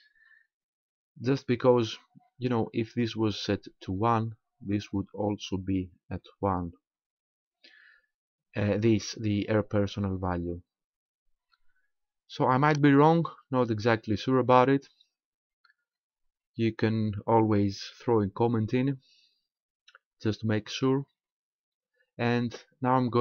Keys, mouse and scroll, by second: 11.3-11.7 scroll down 3, 20.9 scroll up 2.